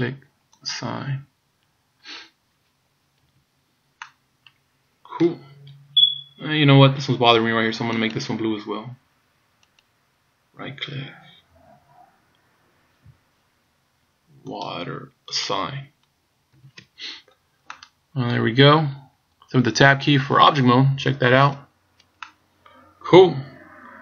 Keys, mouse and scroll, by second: 0.8 click, 3.4 a, 4.1 middle click, 5.6-6.5 scroll up 4, 9.9 right click, 14.7 click, 15.4 click, 16.8 a, 17.3 scroll down 2, 17.8 middle click, 18.8-19.8 scroll down 2, 21.6 Tab, 22.3 middle click.